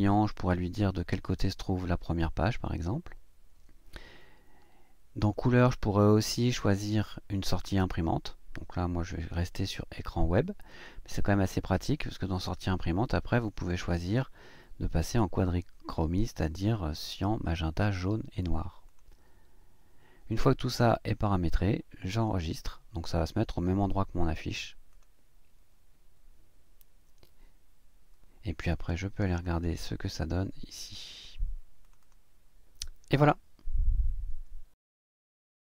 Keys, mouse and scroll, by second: 5.2 click, 6.5 click, 9.9 click, 10.7 click, 13.5 click, 18.9 click, 20.3 click, 24.9 click, 29.3 click, 31.8 click.